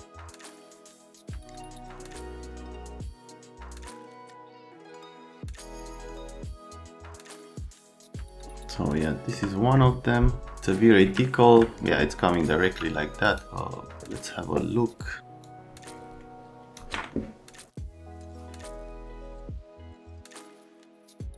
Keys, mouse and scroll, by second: 0.3 middle click, 0.5 click, 0.7 middle click, 0.9 click, 1.3 alt+middle click, 1.5 F3, 1.5 middle click, 1.7 right click, 1.9 click, 3.1 scroll down 1, 3.5 click, 3.6-4.8 typing, 4.4 right click, 4.5 click, 4.8 middle click, 4.9 scroll up 2, 5.3 middle click, 5.5 scroll down 2, 5.6 middle click, 5.8 middle click, 6.9 click, 7.8 alt+middle click, 11.2 middle click, 12.6 c, 15.4 click, 17.9 click, 20.1 click, 20.4 click.